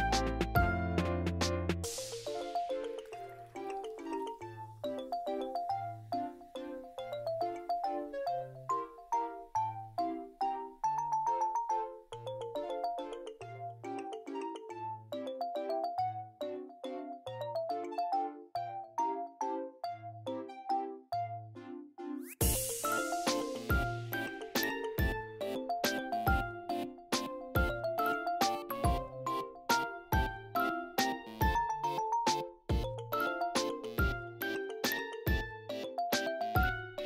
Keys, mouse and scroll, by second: 0.4 scroll down 1, 0.5 click, 1.0 scroll down 5, 1.1 m, 1.3 scroll up 5, 1.3 Tab, 1.4 right click, 1.5 ctrl+l, 1.6 Tab, 1.7 click, 1.8 n, 1.8 n, 1.9 m, 2.0 scroll up 1, 2.1 click, 3.0 ctrl+z, 3.0-4.2 drag, 4.2 scroll down 2, 4.3 click, 5.7 m, 5.8 scroll down 10, 6.0-6.3 scroll up 9, 6.2 click, 6.3 m, 6.4 click, 6.9 scroll down 3, 7.0 click, 7.8 scroll up 1, 7.9 click, 8.4-9.1 scroll down 2, 8.5 click, 8.8 m, 9.1 click, 9.2 scroll up 6, 9.3 m, 9.4 click, 9.9 scroll down 4, 10.1-10.6 scroll up 8, 10.4 click, 10.6 m, 10.7 click, 11.1 m, 11.1 scroll down 5, 11.7 click, 11.9 scroll up 3, 12.0 Tab, 12.0 right click, 12.3 ctrl+l, 12.3-12.6 scroll down 1, 12.6 Tab, 12.9 click, 13.5 click, 14.2-14.7 scroll up 6, 14.4 ,, 14.4 m, 14.7 middle click, 14.7 scroll down 2, 14.9 click, 15.3 middle click, 15.5 click, 15.8 middle click, 16.0 click, 16.6 scroll down 2, 16.7 middle click, 16.9 click, 17.2 middle click, 17.3 click, 17.6 `, 17.7 m, 17.8 scroll down 2, 18.1 click, 18.1 scroll up 6, 18.3 m, 18.4-20.0 drag, 20.0-20.5 scroll down 4, 20.1 click, 20.4 m, 20.5 middle click, 20.8 click, 20.8 scroll up 1, 21.0 click, 21.3 ctrl+z, 21.3 ctrl+z, 21.4 m, 21.5 click, 21.7 middle click, 21.9 click, 22.1 middle click, 22.2 click, 22.5 scroll down 2, 22.6 click, 23.0 middle click, 23.1 click, 23.4 middle click, 23.5 click, 23.8-24.8 typing, 23.8 middle click, 23.9 click, 24.3 scroll down 4, 24.4-24.8 scroll up 4, 24.7 click, 25.3-27.7 drag, 27.7 m, 27.8-28.1 scroll down 7, 28.1 click, 28.1 ctrl+z, 28.2 scroll up 2, 28.6 click, 29.2 middle click, 29.3 m, 29.3 m, 29.4 click, 29.8 scroll up 1, 29.8 middle click, 30.0 click, 30.2 shift+middle click, 30.3 middle click, 30.5 click, 30.6 ctrl+z, 30.6 middle click, 30.9 click, 31.8 shift+middle click, 32.4 ctrl+z, 32.6-33.8 drag, 33.8 middle click, 33.9 click, 34.5 middle click, 34.6 click, 34.9 middle click, 35.1 click, 35.6 shift+middle click, 35.9 click, 36.3 scroll down 1, 36.4 m, 36.5 middle click, 36.8 click, 36.9 scroll up 1, 36.9 middle click, 37.0 m.